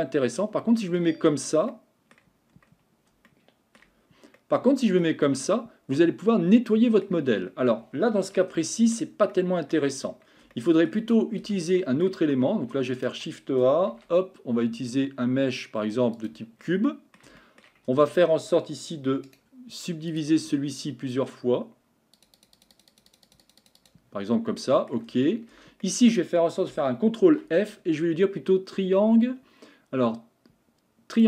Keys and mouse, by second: 0.0 Tab, 0.6 shift+middle click, 1.7 middle click, 3.3 shift+middle click, 4.4 middle click, 6.0-7.0 middle drag, 8.6 shift+middle click, 9.3 middle click, 10.5 shift+middle click, 11.4 Tab, 11.8-12.1 shift+middle drag, 13.0 shift+right click, 13.9 shift+a, 16.9 middle drag, 17.4 shift+middle click, 17.9 Tab, 19.3 right click, 22.3 click, 22.6 click, 23.3 click, 23.4 click, 23.6 click, 23.8 click, 24.6 middle click, 25.1 Tab, 25.8 middle click, 27.2 ctrl+f.